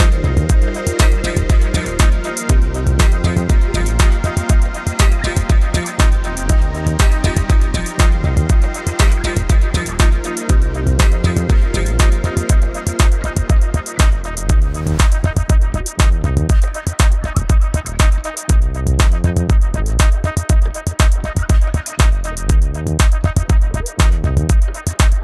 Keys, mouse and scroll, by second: 1.7 click, 3.6 ctrl+alt+click, 4.4-6.7 typing, 4.5 click, 4.9 click, 5.3 ctrl+z, 5.3 click, 5.9 click, 6.1 click, 6.4 click, 8.2 click, 8.3 a, 8.4 click, 8.6 v, 8.7 click, 8.9 ctrl+z, 8.9 click, 9.3 Right, 9.5 click, 10.2 ctrl+alt+click, 11.7 ctrl+click, 11.9 space, 12.1 click, 12.3 -, 12.7 click, 13.2 ctrl+z, 13.5 click, 14.1 ctrl+z, 14.5 click, 15.8 space, 16.3 ctrl+alt+click, 18.1 ctrl+alt+click, 18.3 v, 18.4 click, 20.8 ctrl+alt+click, 22.9 ctrl+click, 23.5 z, 23.6 click.